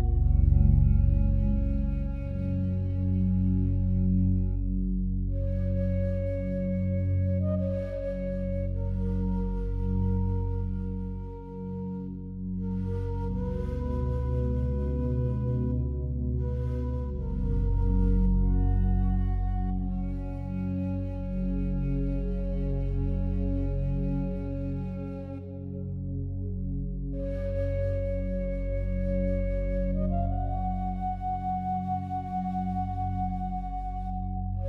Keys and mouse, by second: 0.2-1.3 ctrl+alt+drag, 2.3-4.9 ctrl+alt+drag, 4.9 click, 5.3 click, 5.8-6.6 drag, 7.9 click, 8.7-9.3 drag, 9.9-10.6 drag, 11.2-11.7 drag, 12.4 click, 13.3-14.0 alt+shift+drag, 15.9-18.2 ctrl+alt+drag, 19.8-21.0 shift+drag, 21.6 click, 22.5 click, 23.9 click, 25.1 click, 27.1 click, 28.3 click, 28.8 click, 29.4 click, 30.2 click, 31.1 click, 31.5 click, 32.4 click, 34.3 click.